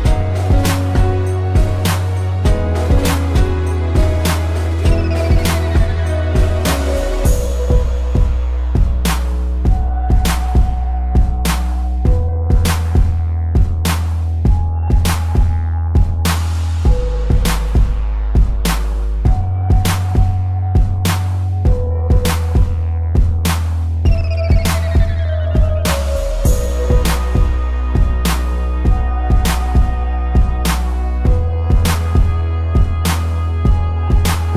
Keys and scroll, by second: 2.5 a, 7.8 space, 14.2 ctrl+0, 16.2 z, 25.9 space, 26.8 p, 28.0 ctrl+=, 28.4 space, 32.1 space.